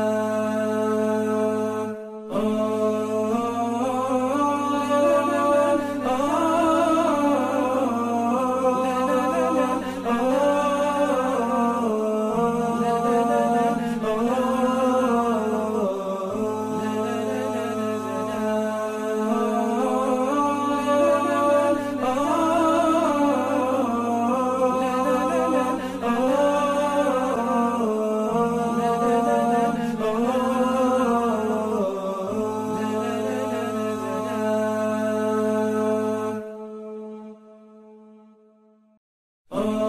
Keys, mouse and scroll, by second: 1.0-1.3 alt+scroll up 1, 5.0 b, 16.4 alt+scroll down 1, 17.0-17.6 alt+scroll up 1, 17.7 alt+scroll up 1, 18.4 alt+scroll up 2, 24.3 alt+scroll down 1, 35.5 ctrl+0.